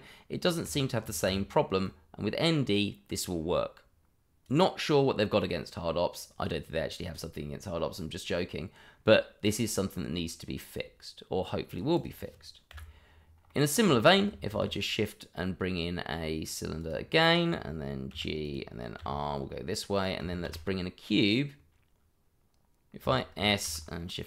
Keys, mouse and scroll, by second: 1.0 ctrl+alt+a, 1.8 click, 9.7 middle click, 11.7 click, 12.0 double click, 12.8 Delete, 13.1 scroll down 1, 13.5 middle click, 13.9 shift+middle click, 13.9 middle click, 14.5 shift+a, 17.3 click, 18.1 g, 18.4 click, 19.0 r, 19.9 click, 20.4 shift+a, 22.9 click, 23.0 s, 23.6 shift+z.